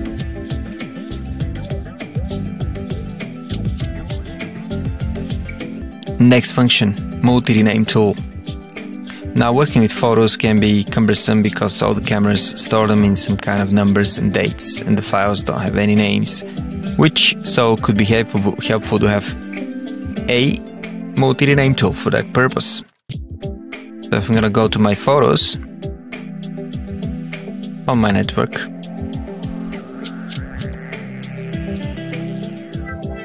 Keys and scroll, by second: 22.9 alt+F1, 23.5 Down, 24.1 Up, 24.3 Return, 24.7 Down, 26.7 Return, 28.7 Down, 30.6 Return, 31.3 Down, 32.3 Return, 32.8 Down.